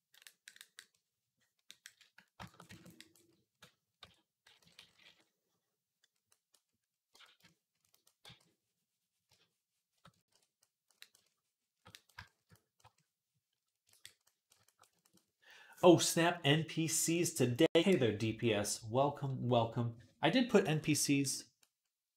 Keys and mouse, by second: 3.8-4.9 typing, 6.9 v, 8.1 v, 10.3 ctrl+r.